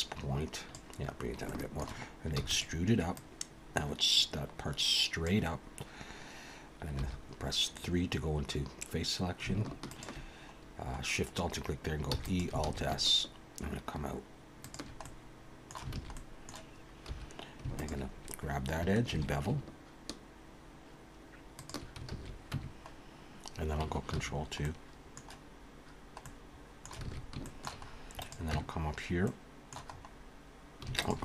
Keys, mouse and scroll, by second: 1.5 shift+middle click, 2.4 e, 3.2 click, 7.0 3, 9.9 alt+shift+click, 12.1 e, 12.7 alt+s, 15.0 middle click, 16.0 alt+a, 16.1 middle click, 17.1 2, 17.8 alt+shift+click, 19.1 ctrl+b, 22.1 alt+a, 22.5 Tab, 22.9-23.8 scroll down 2, 24.2 ctrl+2, 24.6 middle click, 25.6 scroll down 1, 26.2 middle click, 27.0 alt+a, 27.4 shift+middle click, 27.9-28.5 scroll up 2, 28.2 click, 28.5 Tab, 28.8-29.2 scroll up 2, 29.2 middle click, 29.9-30.3 scroll up 2, 31.0 alt+shift+click.